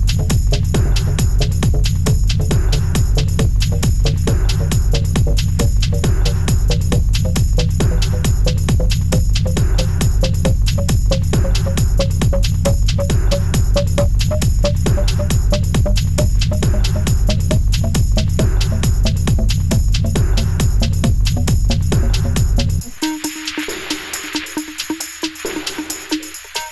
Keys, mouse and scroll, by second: 1.7 scroll down 1, 2.0 s, 4.0-6.1 middle drag, 7.1 g, 10.1 s, 12.2 g, 14.4 g, 15.7-17.7 middle drag, 18.5 scroll down 2, 18.7-19.1 middle drag, 19.1-19.6 scroll up 2, 19.6 drag, 20.2 shift+d, 21.5 middle click, 21.7 scroll down 1, 21.9 shift+middle drag, 22.2-22.6 scroll up 2, 22.6 s, 24.5-25.1 shift+middle drag, 25.1 g, 26.0-26.5 scroll up 1, 26.5 s.